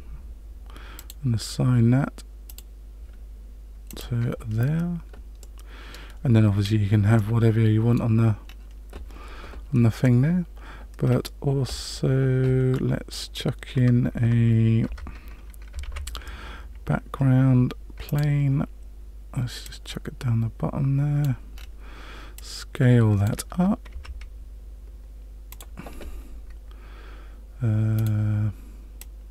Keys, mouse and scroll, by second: 0.9 click, 2.5 click, 3.9 click, 5.4 middle click, 7.1 middle click, 8.4-10.1 scroll down 1, 10.1-11.0 scroll down 1, 11.0-11.5 scroll up 2, 12.7 middle click, 14.8 Tab, 15.8 shift+a, 19.6 click, 21.5-22.3 scroll down 1, 22.3 click, 22.3 scroll down 2, 23.9 s, 27.9 click, 29.0 click.